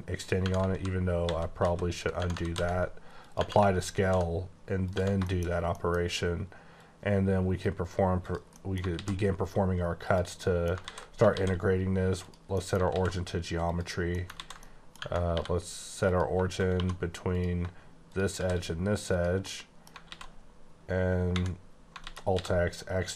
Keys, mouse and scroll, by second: 0.3 Tab, 0.7 ctrl+a, 1.2 ctrl+z, 1.6 ctrl+z, 2.2 Tab, 2.5 ctrl+a, 3.1 click, 3.4 Tab, 4.0 ctrl+b, 4.9 click, 4.9 Tab, 5.2 middle click, 5.5 scroll down 1, 5.6 middle click, 5.9 scroll up 2, 6.7 click, 8.2 click, 8.5 middle click, 8.9 alt+x, 9.4-10.0 scroll down 3, 10.0 click, 10.4 middle click, 10.8 ctrl+z, 11.3 shift+s, 12.2 click, 12.5 middle click, 12.9 alt+x, 13.7 click, 14.1 middle click, 14.3 ctrl+z, 14.6 middle click, 15.0 Tab, 15.3 3, 16.0 click, 16.7 2, 17.3 click, 18.4 shift+s, 19.0 click, 19.4 middle click, 20.1 alt+x, 22.0 x.